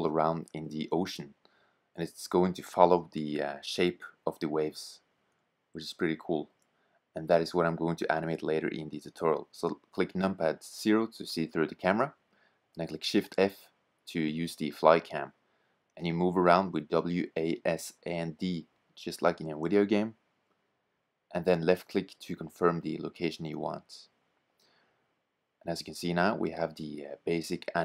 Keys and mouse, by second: 8.9 KP_0, 11.6 shift+f, 12.0 middle click, 12.3 middle click, 23.5 click.